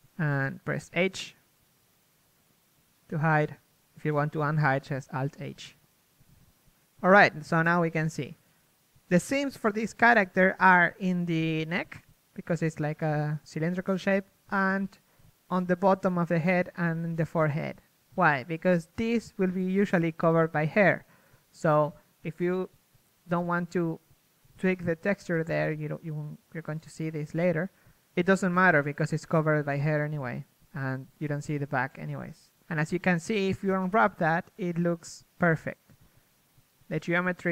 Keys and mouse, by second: 1.4 h, 4.4 h, 5.8 h, 7.6 h, 8.4 Tab, 9.4 a, 14.0-15.5 middle drag, 15.5 KP_1, 19.4 ctrl+Tab, 22.2-23.3 right drag, 23.3-24.6 middle drag, 24.6 a, 25.6 KP_3, 28.7 l, 28.7 u, 32.4-34.1 drag, 34.1 a, 36.1 z.